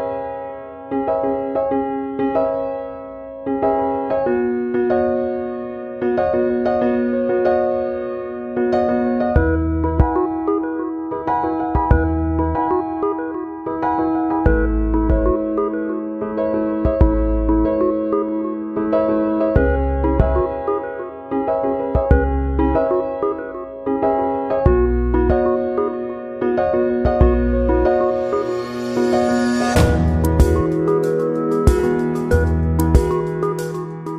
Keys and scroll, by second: 4.4 p.